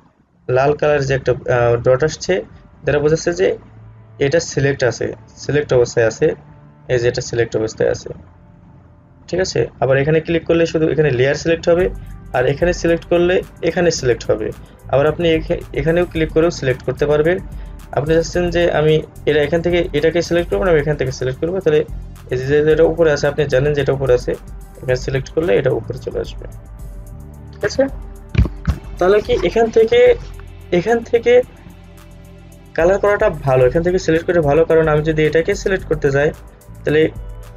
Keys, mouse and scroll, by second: 8.7 click, 15.8 click, 25.5 click.